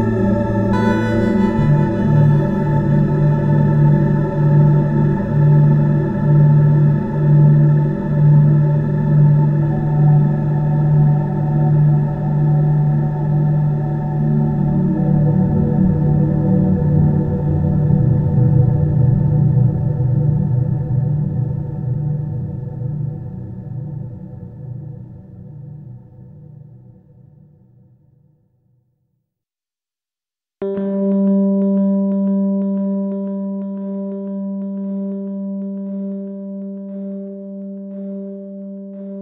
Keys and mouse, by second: 7.2 shift+r, 8.2 shift+r, 9.8 middle click, 9.9 click, 12.4 click, 15.8 KP_7, 23.3 click, 24.7 c, 30.5-31.7 middle drag, 31.7 click, 32.3-33.4 middle drag, 33.4 click, 33.8 middle click, 35.7 click, 36.4 click.